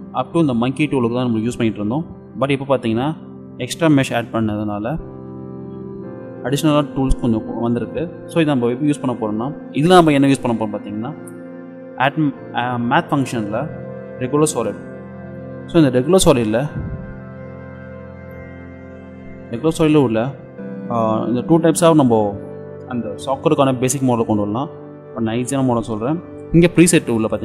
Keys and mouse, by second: 15.3-17.4 middle drag, 17.7 click, 17.8 middle click, 17.9-19.1 drag, 20.5-23.0 middle drag.